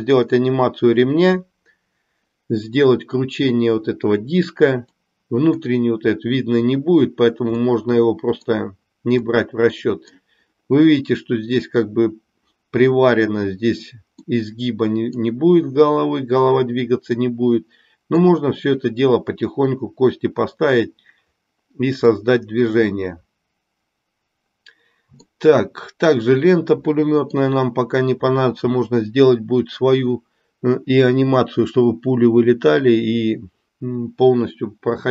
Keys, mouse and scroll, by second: 4.9 middle click, 7.7 middle click, 9.3 middle click, 14.2-15.2 middle drag, 17.2-18.3 middle drag, 22.1-25.3 middle drag, 27.0 middle click.